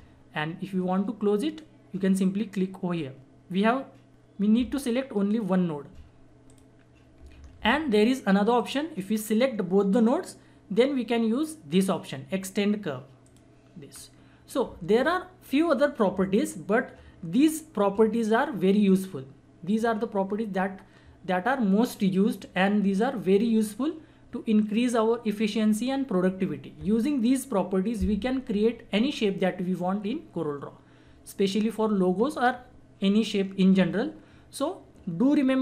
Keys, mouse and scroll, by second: 6.5 click, 7.6 ctrl+z, 8.5-11.2 drag, 13.2 click, 13.9-14.7 scroll down 1.